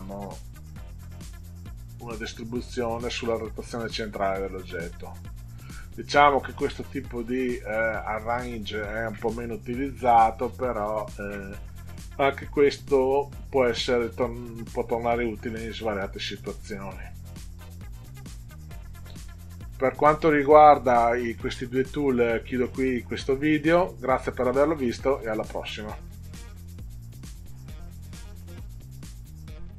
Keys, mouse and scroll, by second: 6.7 middle click, 18.6 click, 29.6 click.